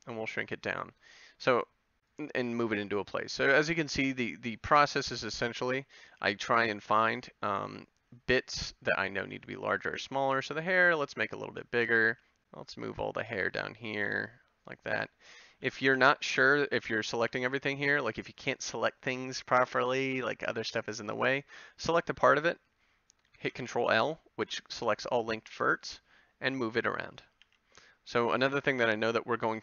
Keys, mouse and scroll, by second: 0.4 g, 3.2 a, 3.6 click, 6.2 b, 7.1 g, 9.2 s, 10.0 g, 11.0 a, 12.1 b, 15.9 ctrl+l, 17.3 a, 18.0 b, 23.5 ctrl+l, 25.5 g, 27.4 a.